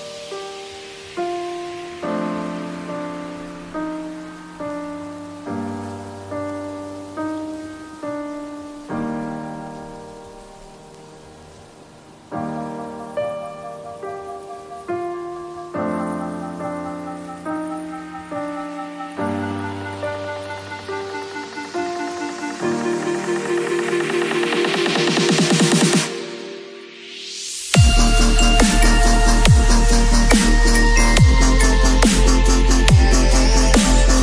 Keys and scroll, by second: 2.0 space, 4.6 x, 8.5 v, 10.8 ctrl+v, 11.9 ctrl+t, 21.4 space, 23.9 b, 27.2 ].